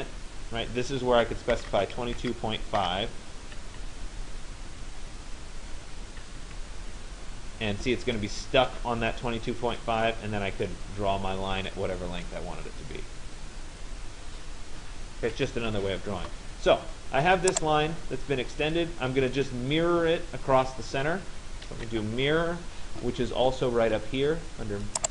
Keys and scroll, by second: 1.2 2, 2.8 5, 3.8 Caps_Lock, 6.5 Tab, 15.1 Escape.